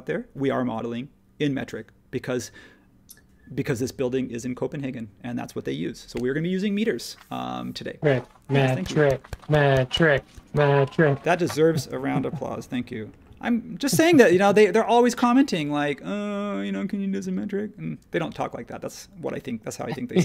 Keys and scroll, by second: 11.8 space.